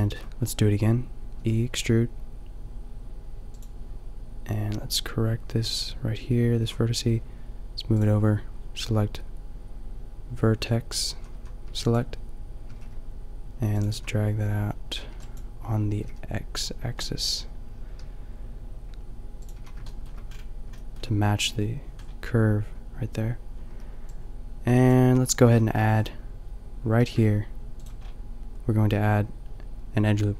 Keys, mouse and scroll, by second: 1.3 e, 6.6 a, 11.1 a, 11.5 b, 12.6 g, 13.9 a, 15.2 b, 15.9 g, 19.5 a, 22.0-23.6 middle drag, 23.6 b, 25.3 a, 25.6 middle click, 27.0 ctrl+r, 28.0 click.